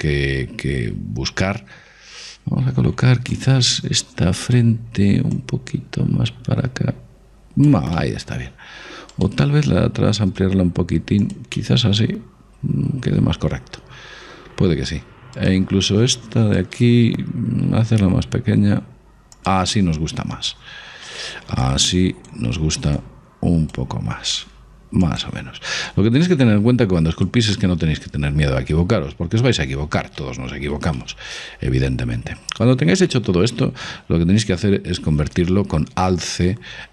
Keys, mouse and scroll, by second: 3.4-6.1 right drag, 5.3-7.1 drag, 8.0-10.2 middle drag, 9.2-11.0 right drag, 10.2 s, 11.7 middle click, 13.3 middle click, 15.5-18.5 right drag, 17.6 s, 19.8-21.7 middle drag, 21.7-24.8 drag, 24.5 s, 25.9-27.6 drag, 27.6-29.5 middle drag, 30.3-35.1 middle drag, 35.1 alt+c.